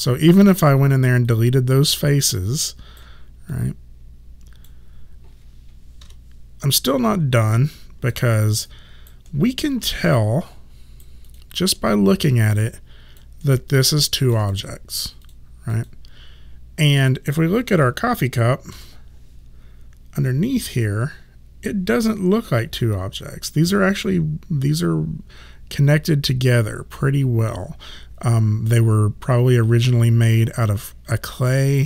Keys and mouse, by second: 0.2 click, 1.3 right click, 3.6 click, 6.1 Delete, 6.1 End, 6.1 Num_Lock, 7.4 alt+click, 8.8 alt+right click, 9.3 alt+middle click, 10.2 right click, 11.3 click, 11.8 alt+middle click, 12.6 alt+click, 13.5 alt+middle click, 14.0 alt+right click, 14.6 click, 18.8 4.